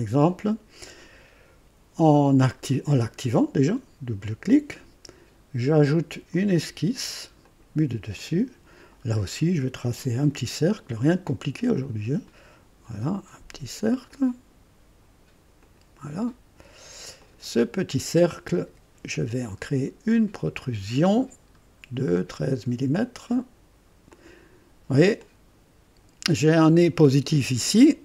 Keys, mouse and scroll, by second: 4.2 click, 6.3 click, 7.4 click, 8.2 click, 9.0 scroll up 2, 10.3 &, 11.7 click, 14.1 click, 14.7 typing, 15.6 click, 17.2 click, 18.6 typing, 20.2 click, 21.4-21.8 scroll up 1, 22.3 scroll up 1, 23.0 scroll up 1, 24.1 click, 25.2-27.0 drag.